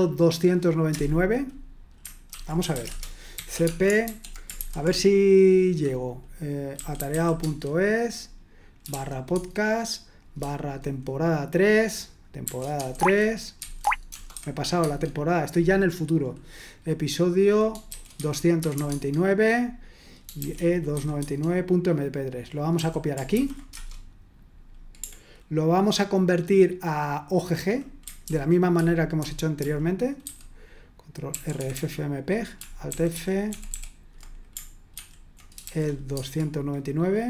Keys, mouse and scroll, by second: 0.9 Return, 2.0-4.6 typing, 6.5-9.4 typing, 12.4-14.8 typing, 17.6-19.2 typing, 20.3-20.9 typing, 21.2 Tab, 23.3 typing, 23.7 Return, 28.3 ctrl+p, 28.8 ctrl+p, 29.2 ctrl+p, 29.6 ctrl+p, 31.3 ctrl+c, 33.1 ctrl+r, 33.5 typing.